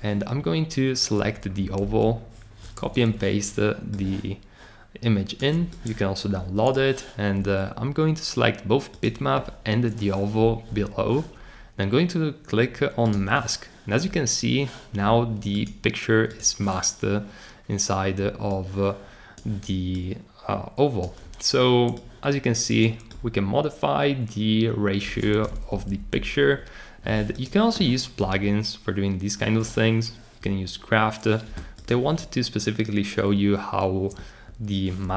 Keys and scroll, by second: 1.8 super+v, 25.7 Down, 25.9 Down.